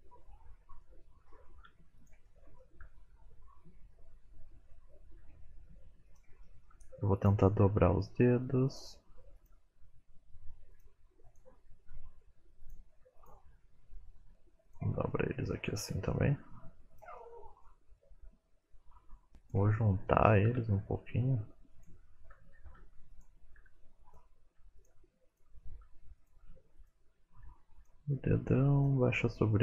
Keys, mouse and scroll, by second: 0.4-0.8 scroll down 4, 0.8 middle click, 1.6 r, 2.2 middle click, 2.8 r, 6.4 shift+middle click, 7.1 click, 7.8 s, 9.3 click, 9.7 s, 10.2 click, 10.6 s, 11.2 click, 11.4 s, 11.9 middle click, 12.4 scroll up 2, 12.6 middle click, 12.9 click, 13.3 middle click, 13.7 shift+click, 14.1 click, 15.1 middle click, 15.7 r, 16.9 middle click, 17.6 middle click, 18.3-19.0 scroll up 2, 18.8 click, 19.8 middle click, 20.5 r, 22.3 r, 23.2 click, 23.4-25.9 typing, 23.8 click, 24.4 click, 25.2 click, 25.9 middle click, 26.2 middle click, 26.3 scroll down 2, 26.4 middle click, 26.8 shift+middle click, 27.6 click, 27.9 r, 29.1 middle click.